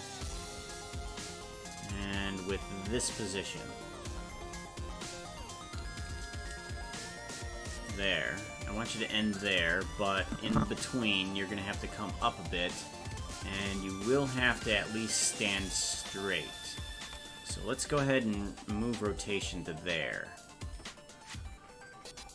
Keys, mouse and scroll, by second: 2.0-5.2 drag, 6.7-7.9 shift+drag, 10.3 click, 12.0-13.4 drag, 14.6-17.1 drag, 17.9 alt+r.